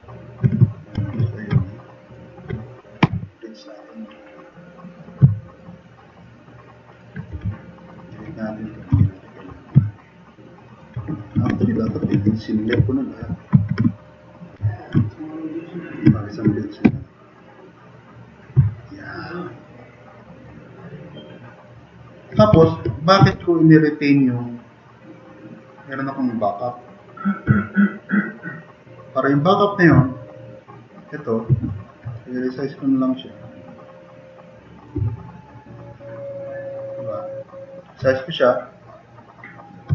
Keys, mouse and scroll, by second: 0.6 click, 1.2 click, 1.6-2.1 drag, 3.0 b, 6.0-6.9 drag, 7.3 e, 7.9 click, 8.9 Delete, 9.9 drag, 11.5 ctrl+z, 11.9 ctrl+z, 12.2 ctrl+z, 12.8 click, 13.9 click, 14.6 drag, 15.5 click, 15.8 click, 16.2 click, 16.8 b, 17.9-18.4 drag, 18.7 click, 19.0-19.4 drag, 20.4-21.2 drag, 21.3 click, 22.5 4, 23.3 e, 27.8-28.6 drag, 29.4 click, 35.2 drag, 35.7 click, 36.3-37.7 drag.